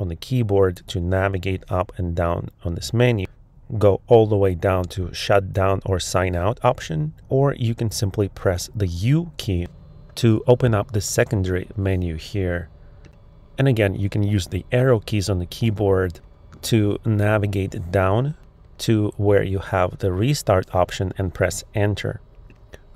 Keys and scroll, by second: 0.1 Down, 0.7 Up, 1.3 Down, 13.6 Down, 14.6 Up.